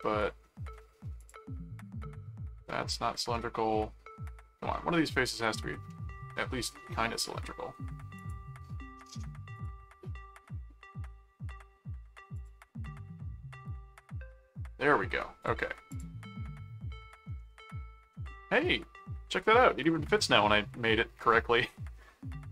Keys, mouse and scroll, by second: 1.2 click, 3.3-5.0 middle drag, 5.9 middle click, 8.1 click, 9.5 click, 12.3 click, 15.9 click, 17.5 middle click, 18.7-20.4 middle drag, 21.3 middle click.